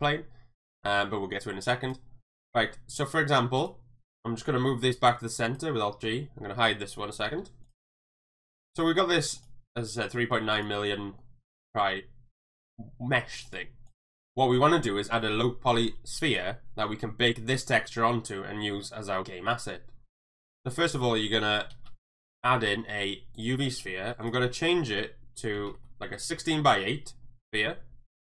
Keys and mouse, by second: 1.8 click, 2.6 shift+middle drag, 2.9 click, 4.9 alt+g, 5.4 click, 7.3 h, 7.7 click, 9.3 click, 11.2 shift+middle drag, 13.9 click, 21.9 shift+a, 24.2-26.6 drag.